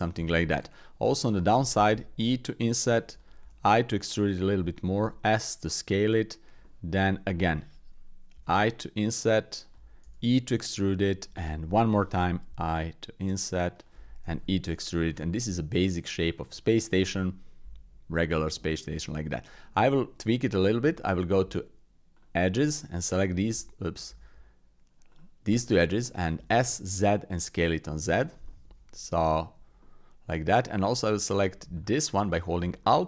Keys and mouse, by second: 0.4 click, 1.0 click, 1.9 i, 3.4 e, 4.6 click, 5.0 s, 6.6 shift+middle click, 7.0 middle click, 8.3 i, 10.0 e, 11.4 shift+middle click, 12.5 i, 14.2 e, 15.2 click, 16.3 shift+click, 16.6 click, 18.6 shift+middle click, 19.1 middle click, 20.8 Tab, 22.1 alt+click, 23.0 alt+shift+click, 24.0 ctrl+z, 25.1 alt+shift+click, 25.6 click, 26.4 s, 28.4 click, 29.2 shift+click, 29.8 click, 31.1 click, 31.7 alt+click, 32.8 click.